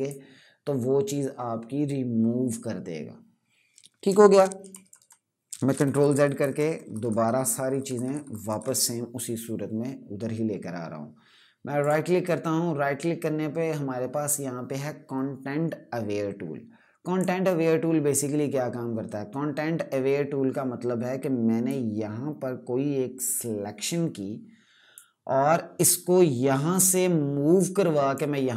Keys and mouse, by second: 3.8 ctrl+Num_Lock, 4.4-8.3 typing, 11.5 right click, 16.9 click, 21.4 click.